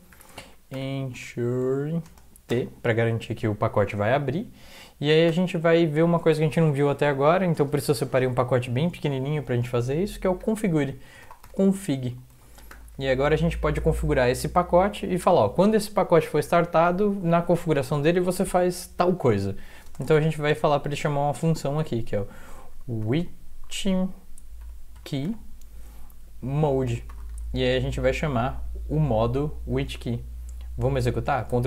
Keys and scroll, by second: 0.0-2.5 typing, 5.3 Return, 10.4 typing, 12.8 typing, 19.9 space, 24.9-27.8 typing, 30.0 End.